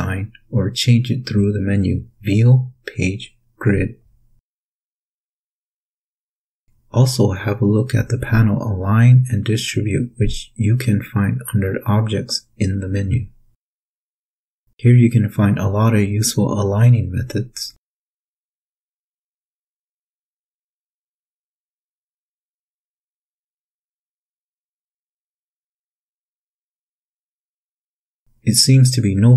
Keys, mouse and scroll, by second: 0.2 #, 9.0 click, 11.3 click, 14.2 shift+click, 15.0 shift+click, 17.6 click, 21.4 click, 23.3-29.3 drag.